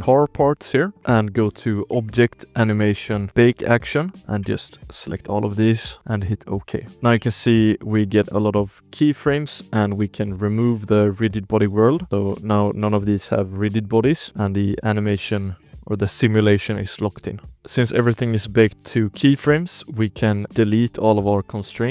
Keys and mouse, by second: 0.1 shift+drag, 0.9 ctrl+s, 0.9-6.5 drag, 6.9 ctrl+s, 7.4-8.6 ctrl+drag, 8.8 shift+drag, 9.6 shift+drag, 10.8 click, 11.5 shift+middle drag, 11.9 ctrl+s, 12.5-13.5 drag, 13.6 shift+middle click, 14.0 ctrl+s, 14.2 space, 14.3 z, 14.6 shift+drag, 14.8 space, 15.1-15.5 shift+drag, 15.5 space, 16.8 shift+click, 17.5 ctrl+s, 17.8 shift+click, 18.6 click, 19.1 KP_Decimal, 19.8 shift+click, 20.1 alt+a, 20.3 ctrl+s, 20.5-21.3 drag.